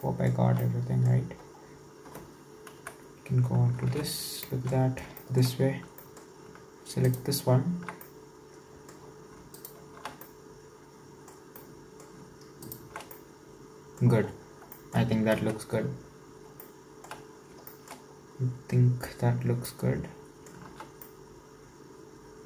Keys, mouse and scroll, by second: 0.1-1.6 shift+middle drag, 1.6-2.8 scroll down 2, 2.8 KP_1, 3.8 alt+z, 4.4 shift+middle click, 4.8-5.2 scroll up 4, 5.2 shift+middle click, 5.5-6.1 scroll up 3, 6.1-7.1 shift+middle drag, 7.1 alt+shift+right click, 8.0-9.6 shift+middle drag, 9.6 alt+shift+right click, 10.3-12.6 middle drag, 12.6 alt+shift+right click, 13.2-14.3 middle drag, 14.3-14.8 scroll down 2, 14.8 shift+middle click, 15.4 KP_1, 16.1-16.6 scroll down 3, 16.6 shift+middle click, 17.3-17.7 scroll up 4, 17.7 shift+middle click, 18.1 scroll up 1, 19.7-20.7 middle drag, 20.7 alt+z, 21.1-22.4 middle drag.